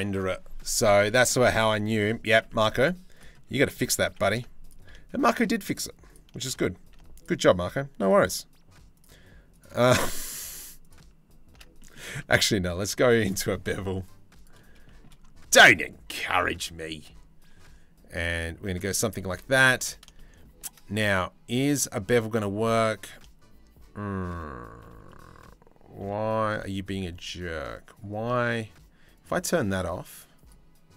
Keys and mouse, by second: 0.7 click, 2.1 click, 3.1 Tab, 3.3 click, 3.7 2, 6.8 alt+shift+click, 8.5 alt+shift+click, 9.6 middle click, 11.4 middle click, 11.7 Tab, 14.5 shift+middle click, 17.7 click, 18.5 click, 18.8 Tab, 19.8 shift+middle click, 24.7 click, 26.1 Tab, 28.8 click, 30.0 click.